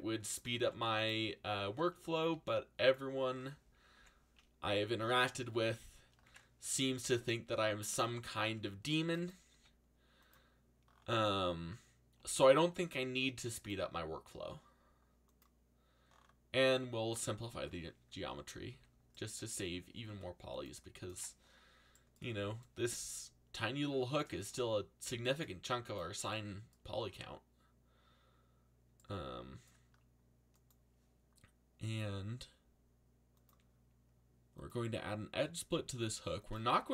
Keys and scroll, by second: 0.3-1.2 typing, 2.3 g, 3.9 z, 4.6 a, 6.8 z, 8.0 c, 9.5 g, 12.1 a, 18.7 z.